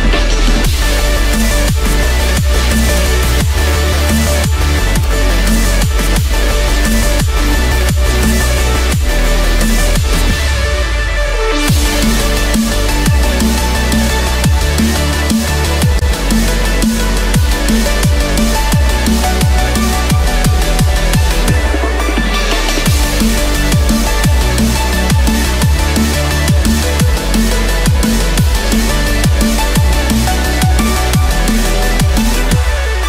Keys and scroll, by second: 5.4 ctrl+=, 26.6 ctrl+-, 27.7 ctrl+=, 32.6 ctrl+-.